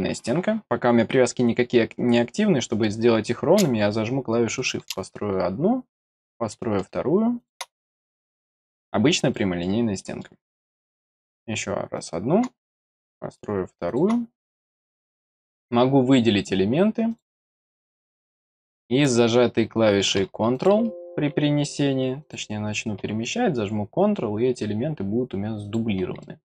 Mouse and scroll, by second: 4.5 click, 5.9 click, 7.4 click, 8.3 middle click, 9.3 middle click, 9.9 middle click, 11.0 click, 11.9 click, 12.8 click, 13.8 click, 15.3 click, 16.3 click, 17.1 click, 20.5 click, 22.2 click, 25.6 click, 26.2 middle click.